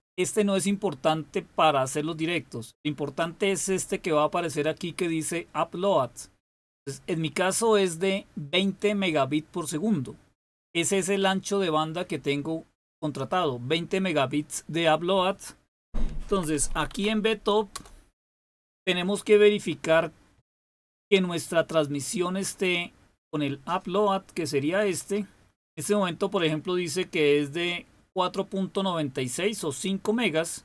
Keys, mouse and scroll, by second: 6.6-8.2 drag, 10.3 click, 13.0 click, 16.0-17.4 typing, 17.7 Return.